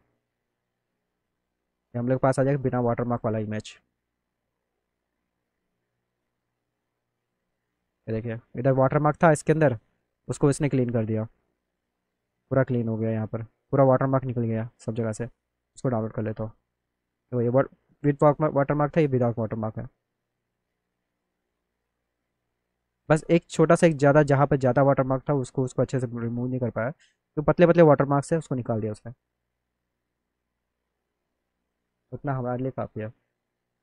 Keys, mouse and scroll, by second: 5.3 click, 7.7 middle click, 15.6 middle click, 17.1 middle click, 20.6 click, 28.9 click, 29.4 click.